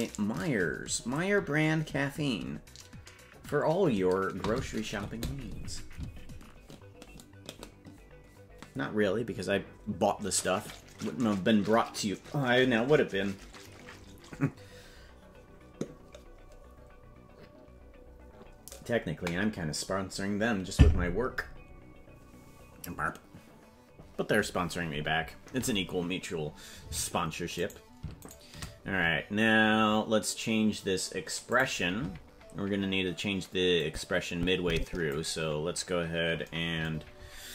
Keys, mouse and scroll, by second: 27.7 right click, 28.3 shift+right click, 31.5 click, 33.8-35.1 drag, 36.9-37.5 scroll down 6.